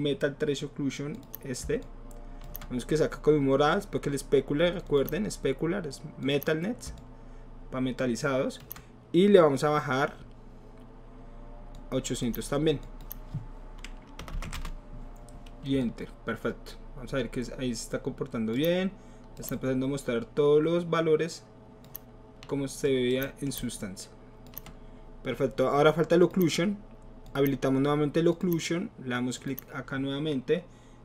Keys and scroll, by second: 14.2 BackSpace, 14.4 BackSpace, 14.5 Return, 14.5 KP_8.